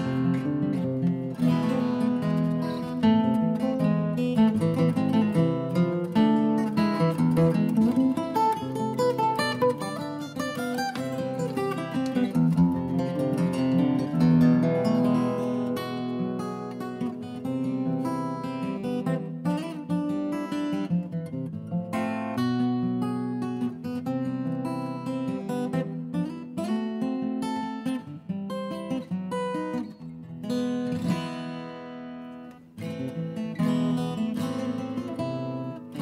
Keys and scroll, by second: 1.3 Down, 1.3 Return, 3.6 Delete, 3.8 Delete, 7.0 shift+Up, 7.5 Up, 8.0 Left, 8.1 Left, 11.7-12.7 typing, 13.3 Delete, 18.2 shift+Left, 18.4 shift+Left, 18.5 Right, 19.0 Right, 19.0 Left, 19.1 Right, 23.8 Down, 23.9 Return, 27.2 Delete, 32.5-33.4 typing.